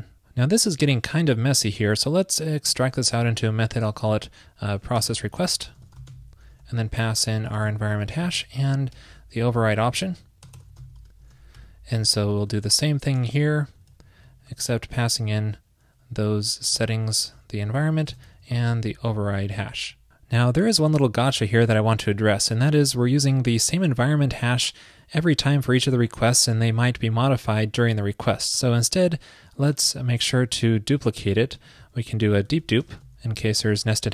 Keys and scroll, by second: 2.9 super+x, 12.5 super+v, 14.4 shift+super+Left, 14.7 super+[, 15.1 super+[, 16.9 super+Right.